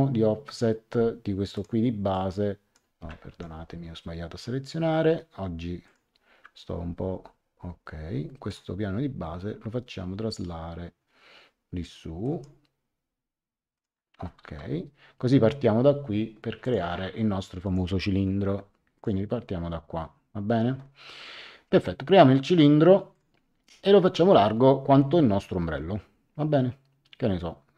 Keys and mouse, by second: 1.5 click, 3.2 Escape, 5.8 click, 8.4 click, 12.2 click, 13.7 click, 14.4 Return, 16.6 click, 17.6 click, 18.9 click, 23.1 click.